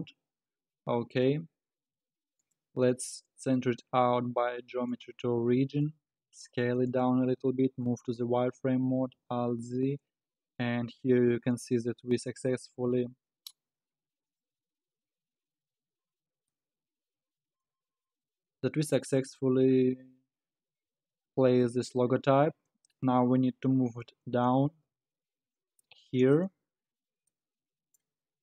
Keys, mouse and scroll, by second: 0.0 Tab, 2.4-5.5 drag, 6.1 s, 7.4 z, 8.2-9.0 scroll down 5, 9.0 alt+z, 10.2-11.5 scroll down 4, 12.9 s, 16.0-16.5 scroll up 7, 16.5-19.5 middle drag, 19.5 KP_7, 20.2 scroll down 5, 22.6-23.7 scroll up 4, 23.7 KP_1, 24.7 g, 26.6 scroll down 5, 27.3-28.1 middle drag, 28.1 scroll up 8.